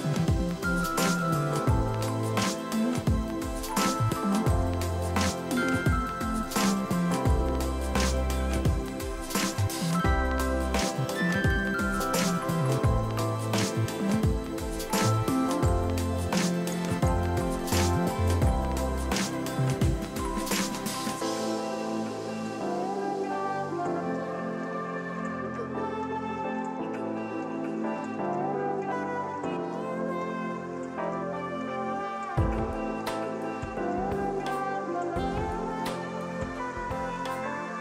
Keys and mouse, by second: 1.1 click, 2.4 right click, 3.2 click, 5.1 Delete, 5.2-6.9 typing, 6.0 click, 7.6 click, 8.6 KP_1, 8.8 KP_0, 9.1 click, 9.3 KP_1, 10.0 click, 10.3 1, 10.6 click, 13.0 ctrl+z, 13.6 click, 14.0 Delete, 14.1 click, 22.8 s, 23.0 ctrl+click, 24.1 click, 31.5 ctrl+shift+x, 31.6 click, 32.1 ctrl+z, 32.3 ctrl+1, 32.4 click, 32.7 ctrl+shift+x, 32.8 click, 33.4 KP_5, 33.5 Return, 33.7 ctrl+1, 33.8 click, 37.1 click, 37.5 ctrl+q, 37.7 click.